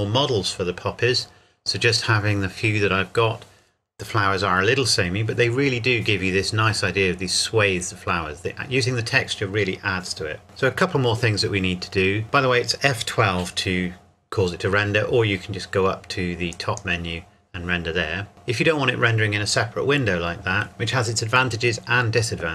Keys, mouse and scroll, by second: 16.5 click.